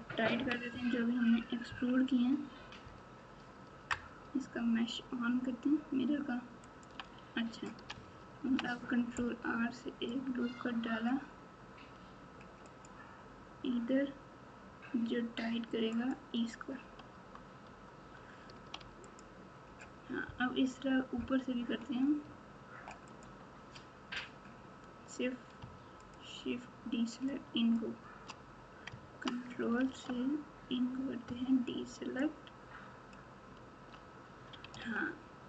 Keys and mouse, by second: 0.3 KP_1, 0.7 KP_3, 1.6 KP_1, 6.6 click, 8.4 ctrl+r, 17.1 Tab, 17.6 Tab, 19.1 alt+click, 23.0 alt+click, 26.0 shift+click, 27.5 shift+click, 29.8 alt+z, 32.2 click, 34.7 alt+z.